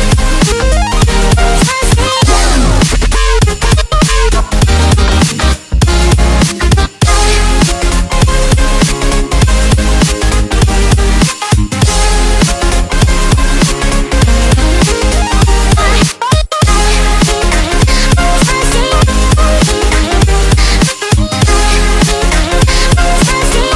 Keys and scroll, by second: 2.2 ctrl+d, 3.2 ctrl+d, 4.2 ctrl+0, 6.7 ctrl+u, 23.6 ctrl+space.